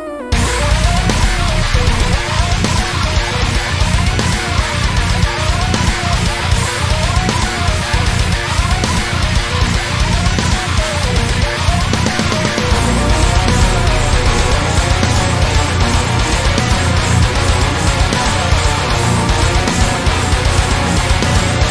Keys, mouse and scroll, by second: 1.1 alt+shift+click, 1.8 click, 2.6-3.6 middle drag, 3.6 click, 4.4 click, 5.0-6.4 shift+middle drag, 6.4 alt+shift+click, 7.0 click, 8.3 click, 8.6 alt+shift+click, 9.2 click, 9.7-10.7 scroll down 4, 10.0-11.4 shift+middle drag, 11.4 click, 11.6 alt+shift+click, 12.2 click, 13.3 alt+shift+click, 14.0-15.4 drag, 14.5 Tab, 15.8-16.2 scroll down 1, 16.2-18.6 middle drag, 18.6-18.9 scroll up 2, 18.9-20.2 shift+middle drag, 19.5 Tab, 20.2 click, 20.5 alt+shift+click, 21.1-21.7 middle drag, 21.1 g.